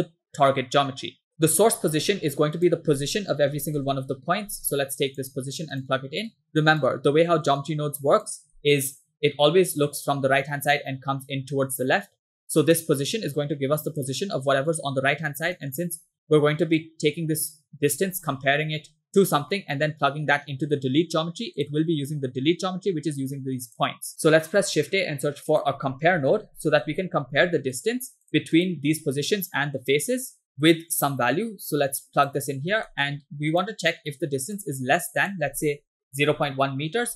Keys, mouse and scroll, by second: 0.5 middle click, 1.3 middle click, 2.0 shift+a, 6.3-6.9 drag, 7.6 drag, 7.8 click, 8.6 scroll down 2, 8.7 middle click, 12.7 click, 13.0-14.1 drag, 15.6 middle click, 15.8-16.2 scroll up 3, 16.8-17.9 drag, 19.5 middle click, 21.6 click, 23.7 click, 24.1 middle click, 24.1 scroll down 2, 24.4 scroll up 2, 24.7 shift+a, 28.6 click, 30.7-32.4 drag, 32.9 middle click, 33.1 scroll up 1, 33.6-34.7 drag, 35.3-36.6 drag.